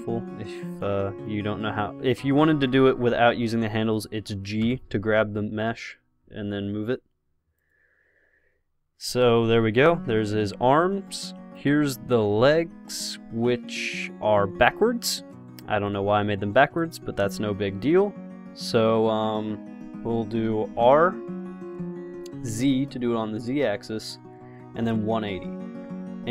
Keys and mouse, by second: 3.0 KP_0, 4.9 g, 11.8-13.8 drag, 12.5 g, 15.7 x, 17.0-18.9 drag, 17.4 g, 21.1 r.